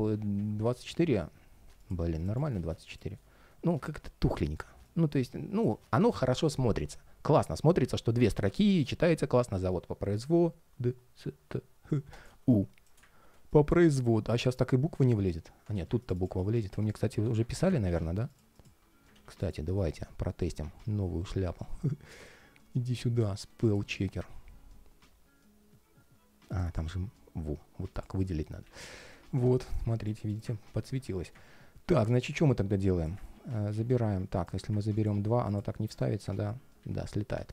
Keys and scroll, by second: 17.0 super+z, 17.6 super+z, 18.9 super+z, 33.0 super+c, 33.4 super+a, 33.6 super+c, 34.8 super+a, 35.5 super+a, 35.8 shift+super+v, 36.5 super+z.